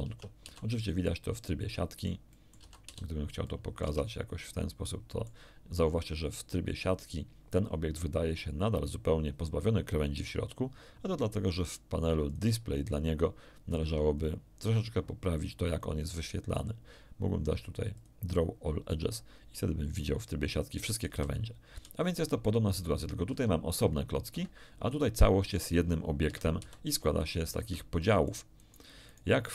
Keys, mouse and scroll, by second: 0.0 Tab, 0.4 z, 0.8 middle click, 1.8 middle click, 2.6 middle click, 2.6 a, 2.8 z, 3.4 middle click, 3.8 Tab, 4.4-5.4 middle drag, 12.2 click, 14.1 click, 17.9 click, 21.0 z, 21.7 z, 22.7 click, 23.2 g, 24.3 Escape, 24.8 click, 25.4 g, 26.2 Escape, 26.6 z, 27.2 middle click, 27.6 Tab, 28.0 middle click, 28.6 middle click, 29.0 middle click.